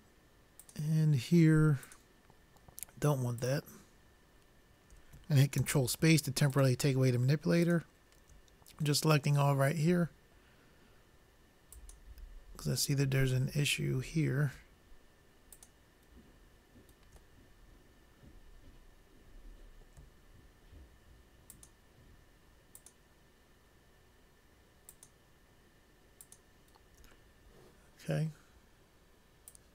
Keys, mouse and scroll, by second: 0.9-5.4 drag, 5.5 click, 5.9 ctrl+space, 6.9-8.2 drag, 9.8-11.5 middle drag, 12.2-13.8 drag, 13.9-15.7 middle drag, 15.8-17.5 drag, 18.2-19.7 middle drag, 20.3 middle click, 21.9-29.7 drag.